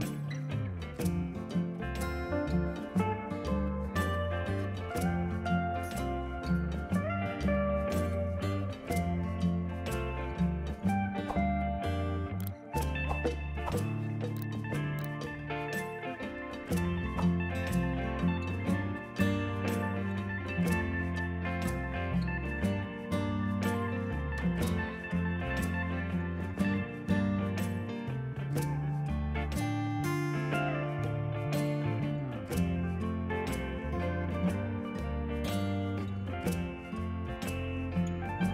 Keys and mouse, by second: 3.0 click, 3.7 KP_1, 4.1 click, 4.3 KP_8, 4.7 click, 6.6 ctrl+z, 7.1 click, 7.6-8.6 typing, 8.0 click, 8.2 click, 11.2 ctrl+z, 11.6 click, 12.1 1, 12.6 click, 19.6 Escape, 19.9 click, 27.3 ctrl+s, 28.3 s, 29.8 ctrl+1, 30.1 ctrl+s, 32.0 click, 32.4 right click, 32.6 click, 32.9 Escape, 33.1 click, 33.5 ctrl+1, 33.6 click, 35.3 right click, 35.6 click, 36.6 right click, 37.3 click, 37.5 right click, 37.7 click.